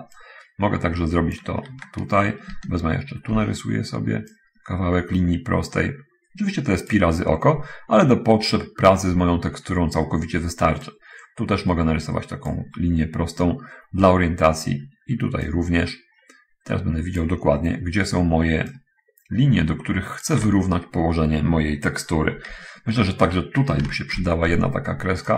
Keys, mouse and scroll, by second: 0.6-1.9 drag, 3.7 ctrl+d, 3.9 ctrl+d, 4.7-7.3 ctrl+drag, 11.2-13.0 ctrl+drag, 15.8-17.4 ctrl+drag, 18.9-20.4 ctrl+drag, 24.5 ctrl+d.